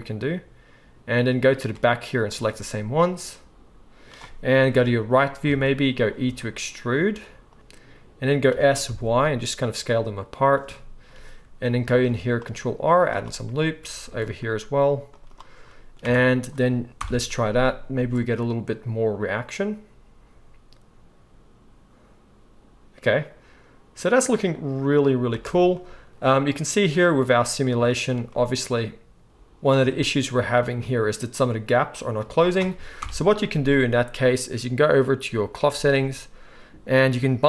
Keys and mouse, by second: 2.3 alt+shift+click, 2.4-5.5 alt+shift+middle drag, 4.7 KP_1, 5.4 KP_3, 6.2 e, 7.6 s, 8.5 s, 11.9 ctrl+r, 14.0 ctrl+r, 14.0-37.4 ctrl+middle drag, 16.0 Tab, 17.0 shift+Left, 18.0 space, 25.5 space, 33.0 shift+Left.